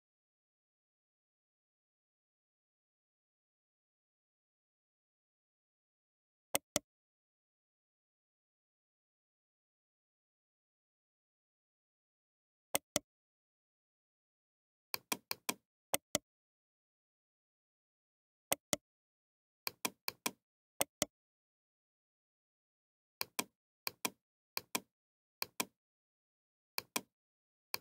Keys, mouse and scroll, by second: 1.0 middle click, 1.6-2.1 middle drag, 2.2 middle click, 2.5 middle click, 3.2 middle click, 3.5 middle click, 3.9-6.5 middle drag, 6.5-8.4 right drag, 7.4 Tab, 9.2 click, 9.5 click, 12.7-13.8 right drag, 13.8 middle click, 13.9 right click, 14.0 middle click, 14.3 right click, 14.8 middle click, 15.4 click, 16.5 middle click, 16.9 a, 17.1 a, 18.5-19.7 right drag, 20.1 click, 21.5-23.2 right drag, 21.5 a, 21.7 a, 23.2-24.7 drag, 27.3 click.